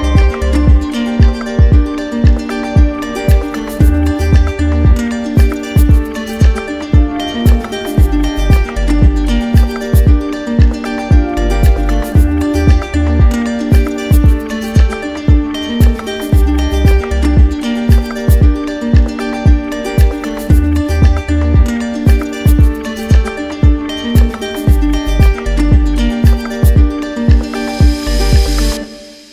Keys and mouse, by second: 0.0-2.2 alt+right drag, 2.2-4.1 alt+drag, 5.7-6.8 right drag, 8.0-9.2 drag, 10.8-11.9 drag, 12.6-13.6 drag, 13.7-14.8 drag, 16.5-17.6 drag, 18.1-20.2 right drag, 26.6-27.7 drag.